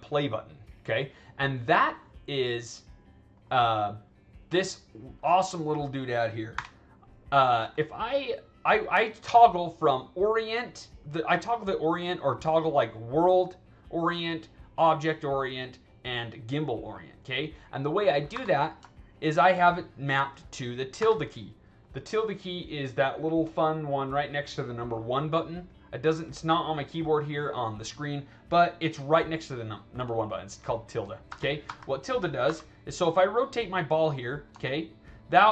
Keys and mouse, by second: 1.8 click, 3.3 click, 4.5 click, 4.9 click, 5.4 click, 6.5 w, 8.6 drag, 18.2 e, 18.8 alt+right drag, 22.3 click, 23.4 click, 32.4 e, 33.0-34.3 drag, 34.5-34.9 alt+right drag.